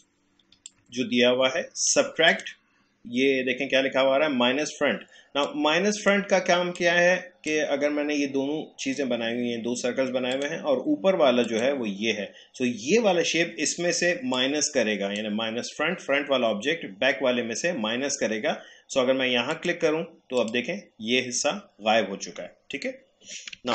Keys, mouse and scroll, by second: 0.7-2.3 alt+drag, 5.7-10.0 drag, 10.3 click, 14.3-17.6 drag, 19.5 click, 23.6 ctrl+z.